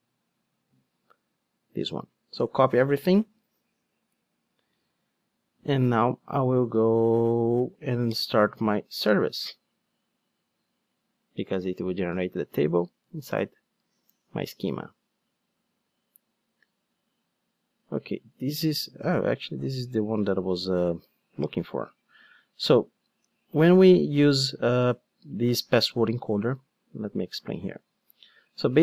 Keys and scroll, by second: 4.7 super+c, 10.9 ctrl+d.